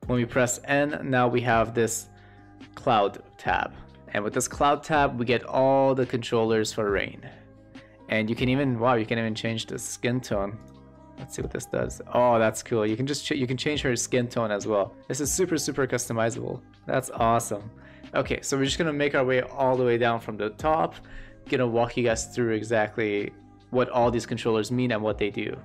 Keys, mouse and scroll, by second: 1.4 click, 4.0 shift+middle drag, 8.9 shift+middle click, 9.5 shift+middle drag, 16.0 shift+middle click, 16.4 middle click, 22.6 middle click.